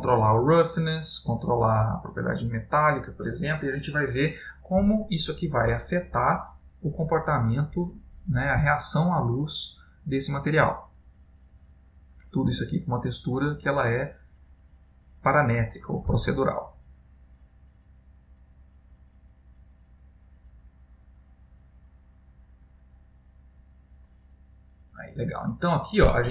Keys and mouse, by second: 0.1 click, 1.5 click, 13.3 click, 25.4 middle click.